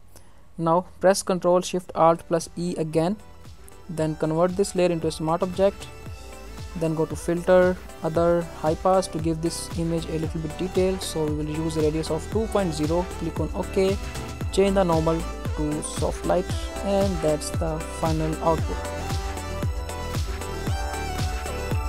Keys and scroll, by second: 2.4 ctrl+alt+shift+e.